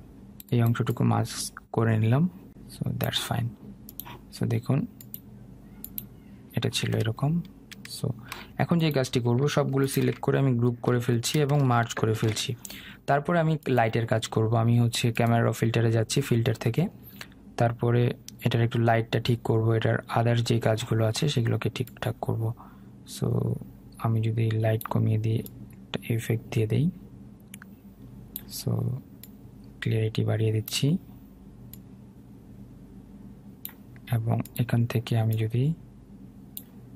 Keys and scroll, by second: 11.2 ctrl+g.